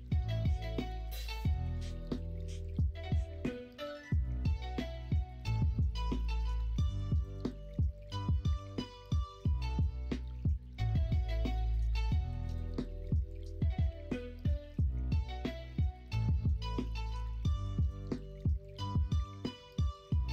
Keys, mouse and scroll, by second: 0.4 middle click, 1.9 middle click, 3.6 2, 12.6 KP_1, 12.7 KP_3, 13.5 alt+z, 15.3 e, 18.7 3.